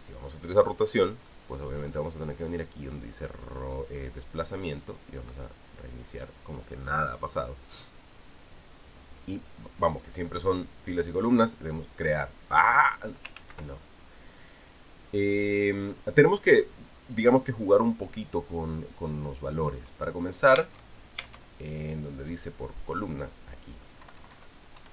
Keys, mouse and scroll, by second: 2.6 click, 5.6 click, 12.4 click, 14.2 ctrl+z, 21.4 Tab, 23.6 click, 24.8 Left.